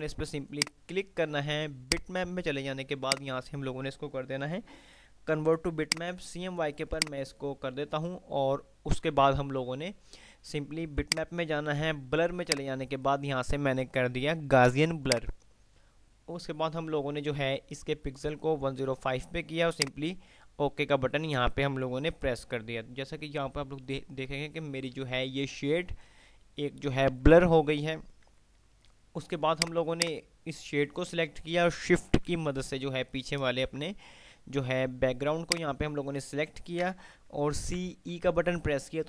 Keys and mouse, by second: 0.0 click, 6.0 click, 11.3 click, 15.3 click, 15.5 typing, 20.2 click, 29.3 5, 29.8-31.0 drag, 37.7-38.2 typing.